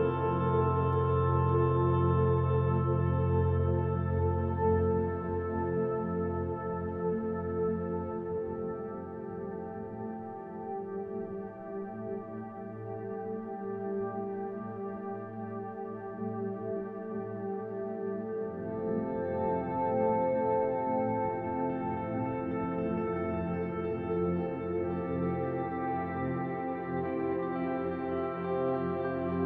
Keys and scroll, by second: 0.0-0.5 typing, 3.6 e, 18.4 f, 20.8 ctrl+alt+1, 21.1 b.